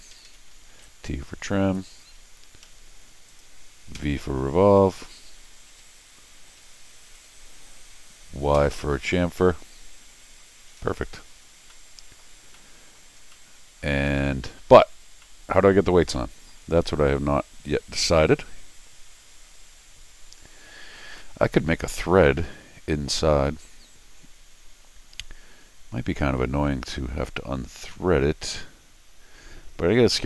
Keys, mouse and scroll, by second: 0.1 Escape, 0.2 Escape, 0.8 t, 0.8 click, 2.6 Escape, 3.3 click, 3.9 v, 6.6 Escape, 7.1 click, 8.5 y, 11.7 middle click, 12.4 middle click, 13.2 middle click, 13.3 middle click, 14.1 scroll down 1, 14.2 middle click, 15.2 scroll up 1, 15.2 middle click, 16.1 middle click, 16.8 scroll down 2, 17.6 scroll up 2, 17.9 scroll down 2, 21.2 middle click.